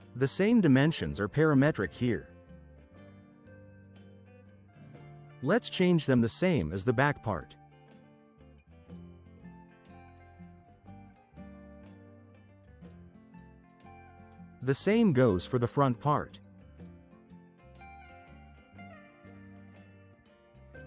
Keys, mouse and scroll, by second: 0.1 4, 0.4 Return, 4.9 click, 6.0-7.0 typing, 7.2 click, 9.6 click, 9.6-10.5 typing, 10.6 Return, 13.3 click, 13.9-14.9 typing, 17.0 click, 17.6-18.6 typing.